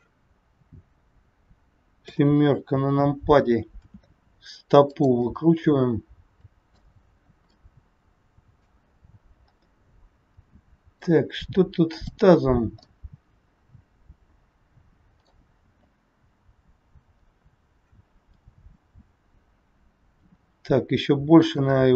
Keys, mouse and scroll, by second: 2.0 KP_7, 3.8 r, 5.3 middle click, 9.4 scroll up 1, 9.5 middle click, 11.9 click, 12.8 middle click, 18.3 KP_7, 20.2 r, 21.8 middle click.